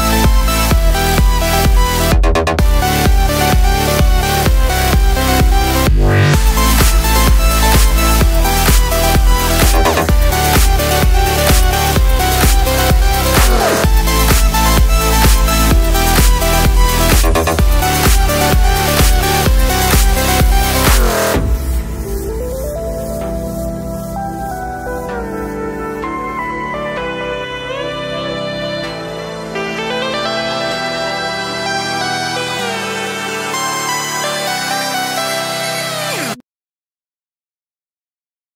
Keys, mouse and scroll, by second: 2.7 click, 2.9 click, 4.9 click, 15.2 right click, 15.9 click, 20.6 click, 25.2 ctrl+shift+2, 25.7 ctrl+2.